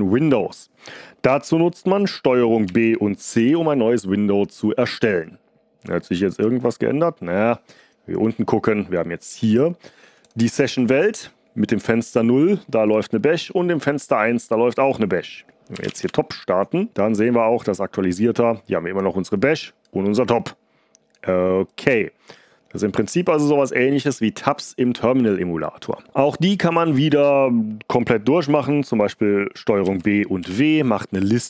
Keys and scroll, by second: 2.6 ctrl+b, 3.3 c, 15.5-16.3 typing, 29.8 ctrl+b, 30.3 w.